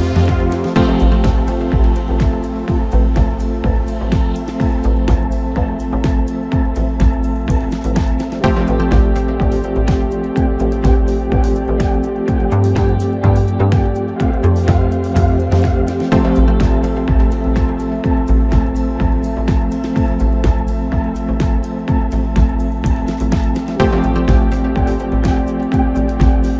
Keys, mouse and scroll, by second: 0.1 click, 1.2 shift+click, 2.3 s, 6.9 click, 8.8 s, 11.8 click, 12.6-13.8 middle drag, 13.8 a, 14.1 3, 14.5-15.0 scroll down 1, 15.0 KP_1, 15.7 scroll up 2, 16.4 e, 18.9 scroll down 2, 19.2-21.1 middle drag, 21.1 KP_7, 22.1-22.5 scroll up 2, 22.5 Tab, 23.5 Tab, 24.5 2, 24.9 click, 25.8 s.